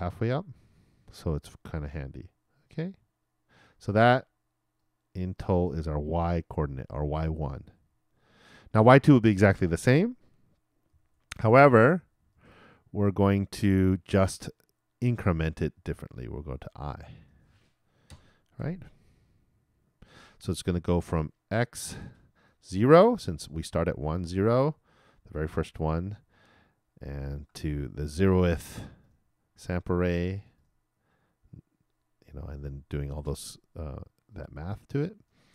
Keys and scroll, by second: 10.9 super+c, 12.3 super+v.